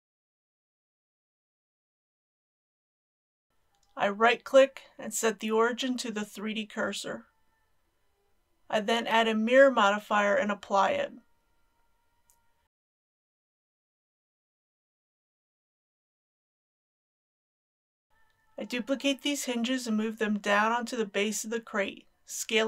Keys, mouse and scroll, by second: 0.3 shift+click, 0.6 KP_1, 4.8 right click, 8.0 click, 13.8 click, 16.9 ctrl+a, 18.1 Return, 19.0 shift+d, 20.0 shift+g, 20.2 shift+z.